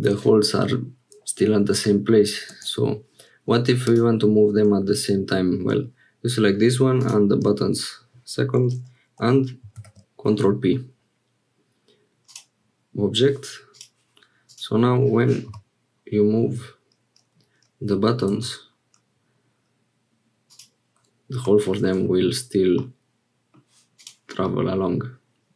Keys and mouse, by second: 3.8 click, 9.8 ctrl+p, 13.7 click, 14.4 click, 15.5 g, 21.7 shift+click, 22.8 middle click, 23.9 click, 24.4-25.5 middle drag.